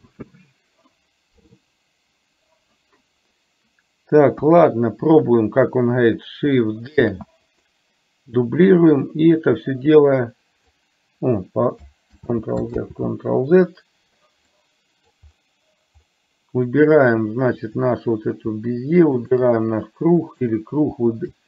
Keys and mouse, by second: 7.1 shift+d, 8.9-10.9 drag, 12.3 ctrl+z, 13.0 ctrl+z, 14.5 middle click, 17.8 click, 19.4 shift+click, 20.3 click.